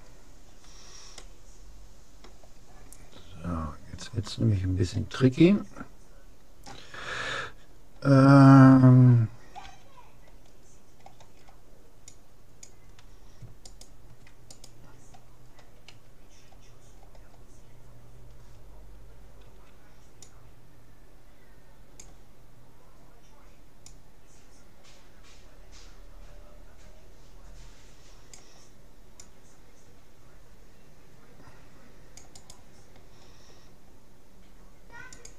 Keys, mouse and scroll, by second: 0.2-3.0 middle drag, 9.6 c, 13.8-16.2 right drag, 16.0 a, 16.5-19.2 middle drag, 19.4 c, 35.2-35.3 drag.